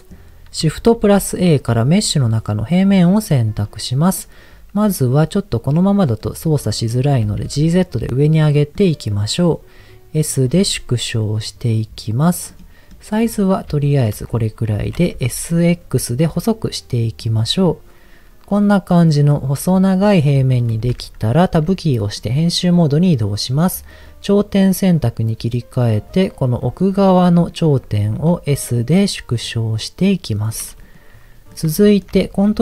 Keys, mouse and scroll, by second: 0.0 middle click, 0.9 shift+a, 3.2-3.8 scroll down 4, 6.4 middle click, 7.2 g, 7.4 z, 8.2 click, 8.6 middle click, 10.4 s, 12.4 click, 13.0 middle click, 13.2-13.6 scroll up 3, 13.8 shift+middle click, 14.1 scroll up 2, 14.8 s, 15.1 x, 17.2 click, 17.6-20.2 middle drag, 21.6 Tab, 22.2 middle click, 23.5 click, 25.0-26.0 drag, 27.0 middle click, 28.1 s, 30.4 click, 30.8 middle click, 31.8 shift+middle click.